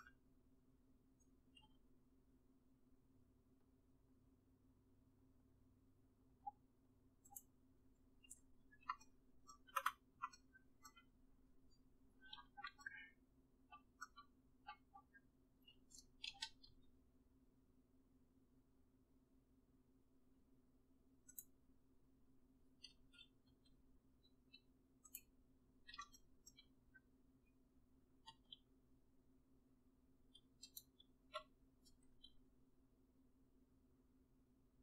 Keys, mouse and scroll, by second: 1.7 g, 16.3 g, 23.0 g, 32.2 s.